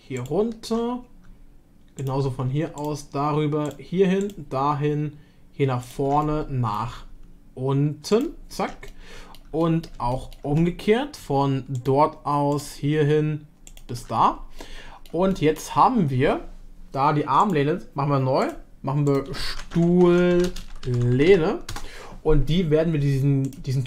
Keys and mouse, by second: 0.1 ctrl+click, 2.0 shift+click, 2.8-4.2 ctrl+drag, 6.2 middle click, 8.9 middle click, 9.7 shift+middle click, 10.2 middle click, 11.8 ctrl+click, 12.5 ctrl+click, 14.6 middle click, 15.3 shift+middle click, 17.4-18.8 drag, 19.1-23.8 drag.